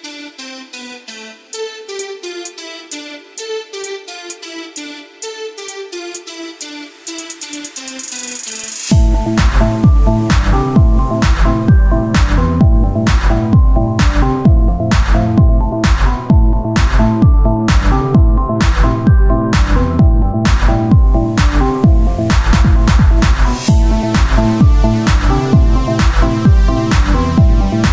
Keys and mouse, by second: 1.6 Tab, 3.5 KP_1, 4.3 Tab, 7.1 r, 8.6-10.4 drag, 10.4 middle click, 12.6 Tab, 12.6 click, 14.4 click, 15.7 Tab, 17.3-18.3 drag, 18.3 ctrl+b, 23.4 Tab, 23.4 click, 25.2 ctrl+z, 25.6 ctrl+z, 26.3 s.